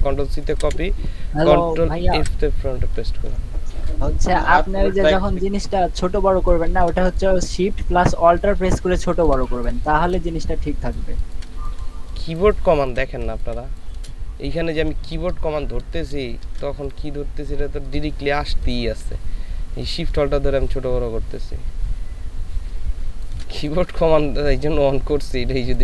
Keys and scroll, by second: 0.5 ctrl+c, 2.1 ctrl+f, 8.2 ctrl+space, 9.8 ctrl+space, 10.5 ctrl+space, 13.2 ctrl+space, 25.4 ctrl+space.